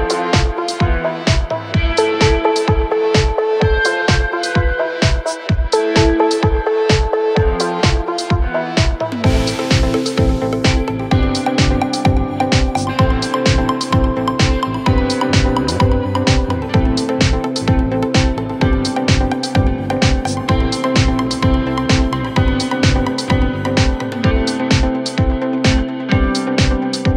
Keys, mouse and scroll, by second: 0.4 Tab, 1.0 click, 2.0 r, 3.1 click, 3.8 scroll up 2, 3.8 middle click, 4.8 click, 5.6 Tab, 6.2 click, 7.1 Tab, 7.7 middle click, 7.9 KP_1, 8.4-9.2 scroll down 2, 9.2 click, 10.9 e, 11.5 e, 12.1 click, 13.2-14.5 drag, 15.1 click, 15.3-15.9 scroll up 2, 15.4 click, 15.5 middle click, 15.9 scroll down 3, 16.0 middle click, 16.2 scroll up 3, 16.3 middle click, 16.8 KP_1, 17.2 scroll up 1, 17.3 click, 17.6 scroll down 1, 17.8 click, 19.1 scroll up 2, 19.2 scroll down 4, 19.4 click, 20.1 middle click, 20.7 middle click, 21.0 click, 21.5 scroll up 2, 21.6 middle click, 21.8 KP_1, 22.1-22.4 scroll down 5, 22.4-23.5 drag, 24.2 click, 25.2 click, 25.6 middle click, 26.1 click.